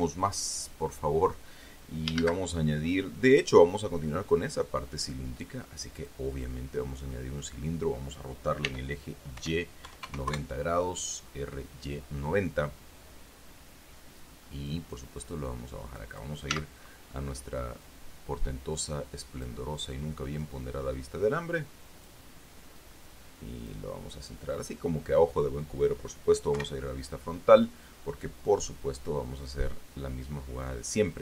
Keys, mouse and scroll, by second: 0.2 shift+a, 2.5 shift+a, 6.3 click, 9.0 r, 9.7 y, 10.2 KP_9, 10.4 KP_0, 10.6 KP_Enter, 15.0-16.7 drag, 16.9 z, 18.2-20.0 drag, 20.7-22.6 drag, 23.1-24.2 drag, 26.9 KP_1.